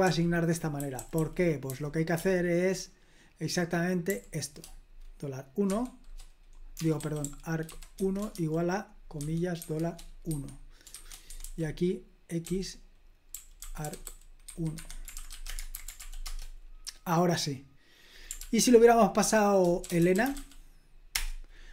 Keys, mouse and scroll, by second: 0.0 super+l, 0.5-2.6 typing, 4.1 typing, 5.7 typing, 6.7-11.4 typing, 11.3 Escape, 12.4-15.6 typing, 15.7 super+h, 16.0 ctrl+p, 16.2 Return, 18.4 ctrl+p, 19.6-20.8 typing, 21.1 Return.